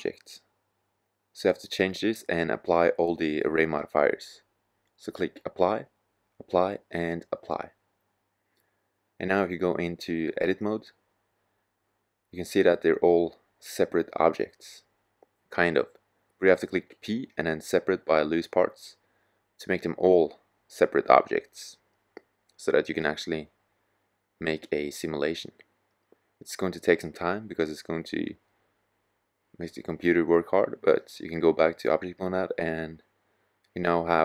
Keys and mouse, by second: 3.0-4.9 drag, 13.5 drag, 15.8 p, 31.4-34.2 drag.